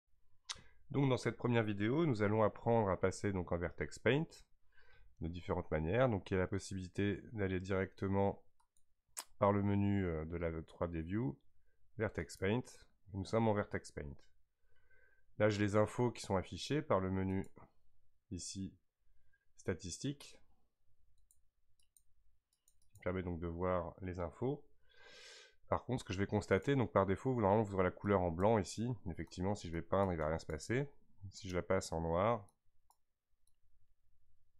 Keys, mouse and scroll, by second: 8.6-11.7 drag, 17.3-20.4 drag, 26.6 click, 29.4-31.5 drag, 33.6-34.5 drag.